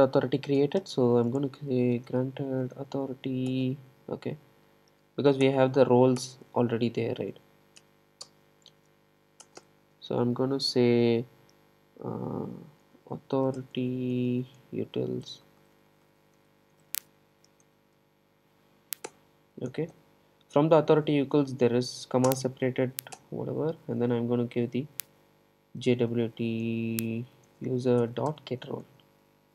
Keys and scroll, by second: 3.5 Return, 19.2 Return, 28.1 Return.